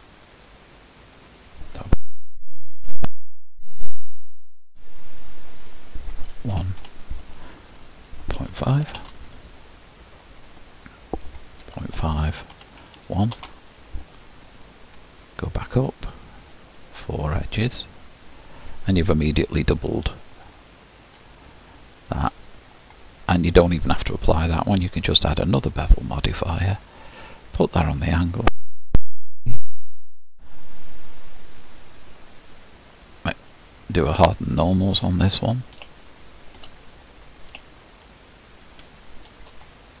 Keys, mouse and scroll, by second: 10.4-20.5 drag, 20.5-21.3 scroll up 1, 21.3-22.0 scroll down 1, 22.0-24.8 middle drag, 26.2-27.8 drag, 29.8-31.8 drag, 31.8-34.3 scroll up 1, 34.3-34.6 scroll up 1, 34.6 click, 35.4-37.1 middle drag, 37.1-37.8 scroll up 4, 37.8-38.4 scroll up 1, 38.4-40.0 shift+middle drag.